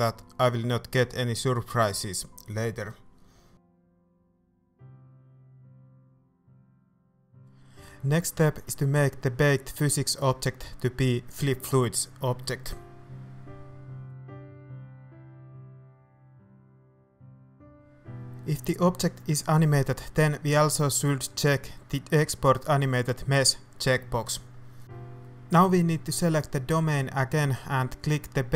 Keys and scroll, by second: 4.5 shift+a.